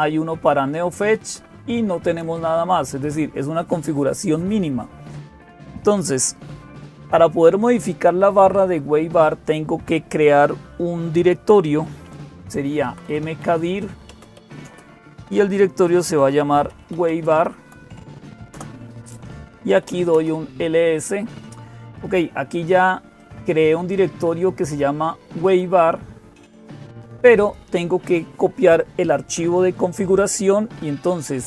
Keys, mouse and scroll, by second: 0.0-31.4 typing, 23.0-27.4 drag.